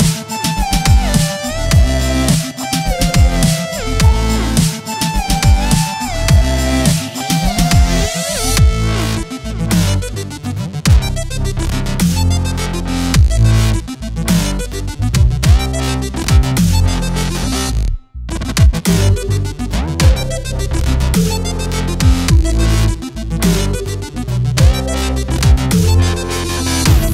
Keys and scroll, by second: 0.0-1.0 typing, 2.0 i, 3.4-7.4 typing, 8.9 i, 9.8 v, 10.4 ctrl+z, 11.0 z, 11.3 space, 11.9 ctrl+z, 12.6 space, 13.1 i, 14.6 space, 16.6 z, 16.9 space, 17.8 v, 20.5 z, 20.9 space, 21.3 v, 21.8 Delete, 22.4 space, 22.7 z, 23.2 space, 23.5 v, 25.6 \, 26.5 \.